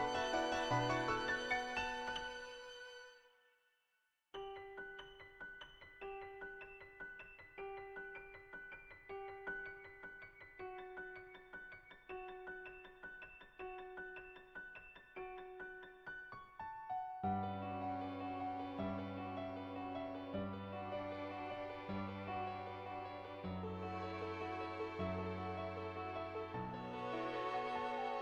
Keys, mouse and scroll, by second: 0.2 ctrl+z, 0.5 click, 0.8 click, 1.3 click, 1.8 click, 2.3 click, 3.1 click, 3.7 click, 4.1 click, 4.6 click, 5.2 click, 5.9 click, 6.6 ctrl+z, 6.9 click, 7.9 click, 8.7 click, 9.1 click, 10.6 click, 11.4 click, 12.2 click, 12.9 click, 14.8 click, 15.2 click, 15.6 ctrl+z, 15.8 ctrl+z, 15.9 click, 16.2 click, 16.9 click, 17.2 click, 18.5 click, 19.2 ctrl+z, 19.5 ctrl+z, 19.8 click, 20.1 click, 20.7 click, 24.2-25.7 drag, 26.0-27.2 drag, 27.4 ctrl+z, 27.6 click.